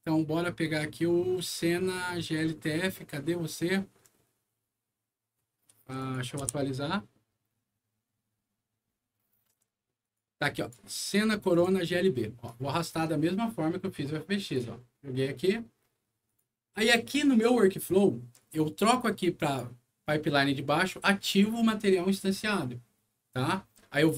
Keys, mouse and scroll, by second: 2.3 scroll down 1, 4.0 scroll up 1, 5.3 scroll up 1, 6.0 click, 6.4 F5, 6.9 scroll down 1, 10.0 click, 10.5 click, 11.5 click, 12.4-14.5 drag, 16.2 click, 19.4 click.